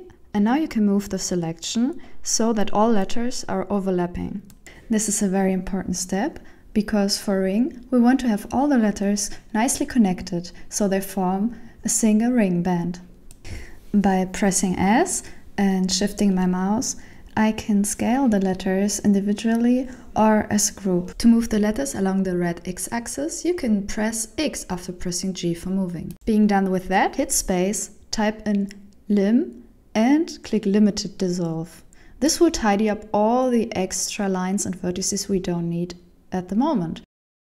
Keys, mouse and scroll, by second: 6.2 shift+middle click, 7.1 alt+a, 7.8 right click, 9.2 ctrl+l, 10.7 c, 14.1 s, 19.2 g, 21.2-23.7 typing, 22.0 shift+middle click, 22.0 right click, 22.1 ctrl+l, 23.2 alt+a, 24.2 shift+middle click, 24.4 alt+a, 24.6 right click, 24.7 shift+right click, 24.8 right click, 24.8 shift+right click, 24.9 ctrl+l, 25.1-27.9 typing, 25.3 shift+middle click, 25.5 shift+right click, 25.7 ctrl+l, 26.3 shift+right click, 26.4 ctrl+l, 27.1 alt+a, 27.2 right click, 27.3 ctrl+l, 33.3 click, 36.9 Tab.